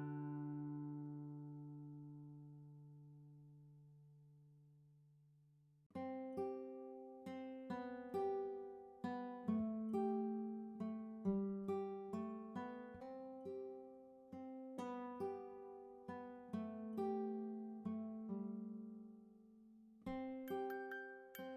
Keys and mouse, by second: 2.2 click, 4.5 shift+Down, 4.8 shift+Down, 5.1 shift+Down, 9.9 right click, 11.8 click, 13.1 click, 13.6-15.0 typing, 14.1 Return, 18.6 click.